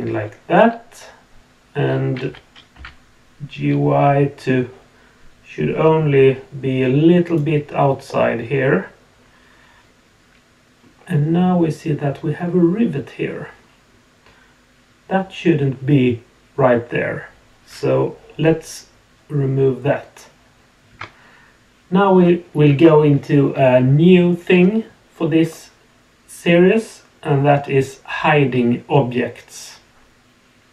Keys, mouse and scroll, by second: 0.2-2.0 middle drag, 2.2 g, 8.0-10.8 middle drag, 20.9 Tab.